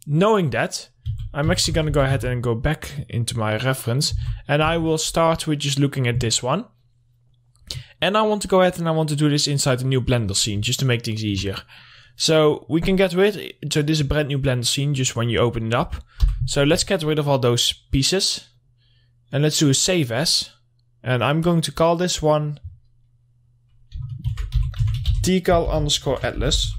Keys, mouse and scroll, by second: 1.4 Right, 1.7 Left, 4.7 Left, 7.2-10.0 drag, 10.4 middle click, 10.8 scroll down 1, 11.1 alt+middle click, 12.7-16.2 drag, 17.3 middle click, 18.1 scroll up 1, 18.8 click, 22.5 click, 24.7-26.7 typing.